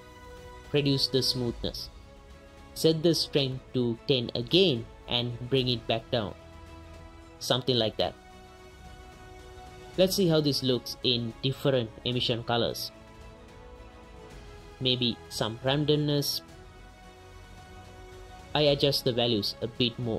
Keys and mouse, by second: 0.9 click, 2.5 click, 3.5 click, 4.5 click, 5.4-8.3 drag, 8.7 ctrl+shift+click, 9.2 ctrl+shift+click, 10.1 click, 10.5 right click, 15.4 right click, 15.9 right click, 16.3-17.4 right drag, 19.1 right click, 19.9 right click.